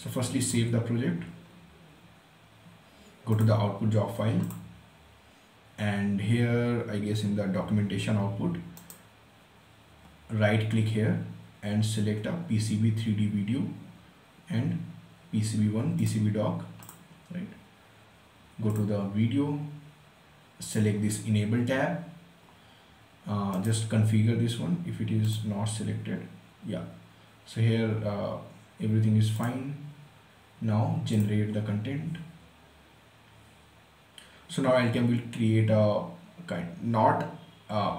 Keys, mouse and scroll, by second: 2.9 click, 8.4 right click, 15.6 click, 23.1 right click, 28.9 click.